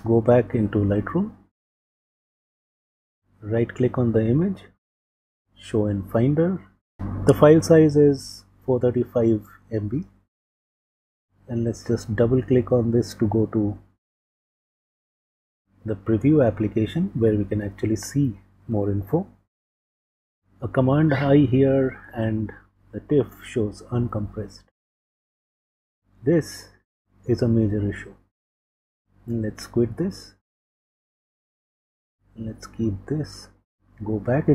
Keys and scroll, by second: 0.0 super+Tab, 20.1 super+i, 29.2 super+q, 33.5 super+Tab.